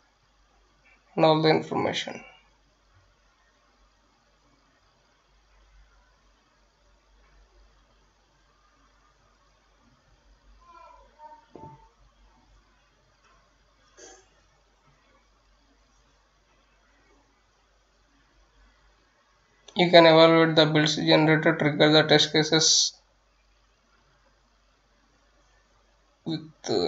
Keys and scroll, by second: 0.8 F9, 8.7-26.8 typing.